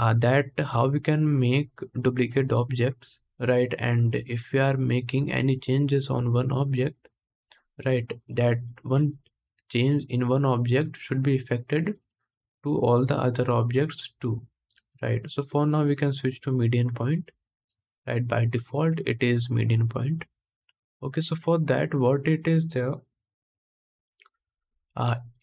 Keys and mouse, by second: 14.9-25.4 drag.